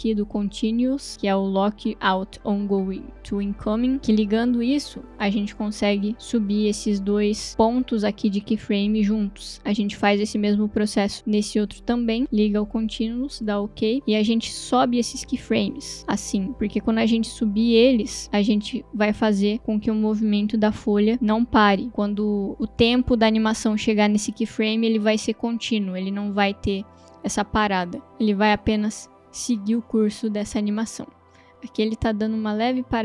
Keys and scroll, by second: 25.8 space, 28.3 space.